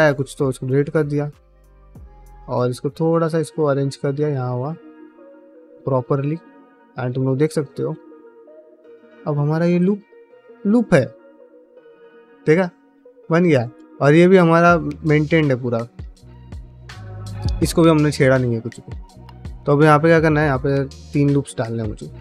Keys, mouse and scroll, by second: 0.6 middle click, 1.0 click, 1.2 g, 1.8 click, 2.0 g, 2.7 click, 2.8 g, 3.3 middle click, 4.5-6.3 middle drag, 6.5 2, 6.8 click, 7.0 f, 7.3 middle click, 7.8 ctrl+z, 8.4 click, 8.6 f, 9.0 middle click, 9.6 3, 9.9 alt+click, 10.4-13.0 middle drag, 13.3 3, 13.8 alt+click, 14.1-16.7 middle drag, 18.3 middle click, 18.7 ctrl+middle click, 18.9 middle click, 19.4 ctrl+r.